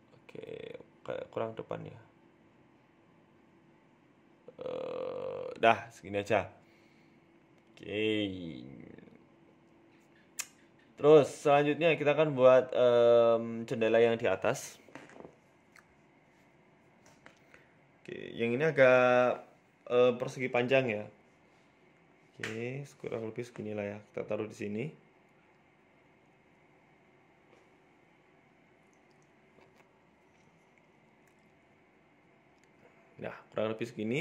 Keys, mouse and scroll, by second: 0.2 KP_Decimal, 0.6 middle click, 1.5-1.9 scroll up 2, 1.9 g, 5.5 g, 7.2-8.3 scroll down 6, 7.4 middle click, 7.8 middle click, 8.6 KP_1, 11.7 shift+middle click, 12.7 shift+a, 14.1 scroll up 1, 14.7-15.8 scroll up 1, 15.9 shift+middle click, 16.3 z, 17.3 scroll up 2, 17.5 shift+middle click, 18.0 s, 19.6 s, 23.0 s, 24.4 shift+middle click, 24.7 g, 25.7-26.1 scroll down 2, 25.9 shift+middle click, 26.3 s, 27.2 g, 28.5 s, 31.2 scroll up 4, 31.3 shift+middle click, 31.7-32.1 scroll down 3, 32.0 Tab, 32.4 Tab, 32.7 s, 33.8 Tab, 34.0-34.2 scroll up 1.